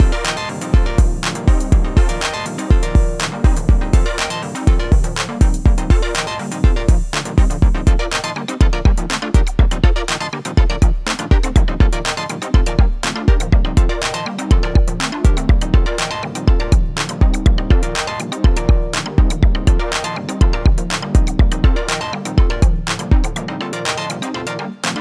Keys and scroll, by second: 1.6 ctrl+-, 12.0 ctrl+=, 16.8 Return, 23.7 Return, 24.5 alt+[.